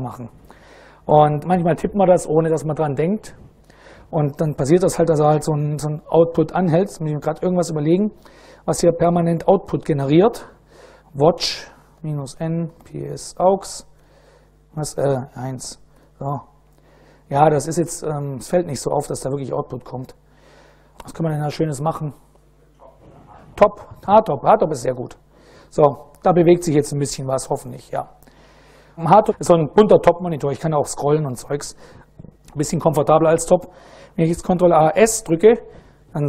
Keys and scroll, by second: 7.3 ctrl+a, 7.8 q, 10.8-13.5 typing, 13.6 Return, 14.7 Left, 15.0 1, 15.5 Return, 20.3 ctrl+c, 23.6-24.8 typing, 30.3 Down, 30.5 Down, 30.8 Up, 31.0 Up, 34.2 ctrl+a, 34.4 ctrl+s.